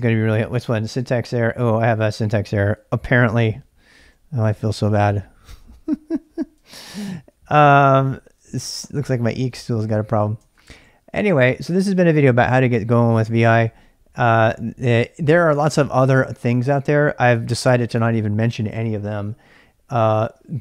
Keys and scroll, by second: 2.5-3.9 typing, 6.8 ctrl+a, 7.3 ctrl+a, 8.4-10.7 typing.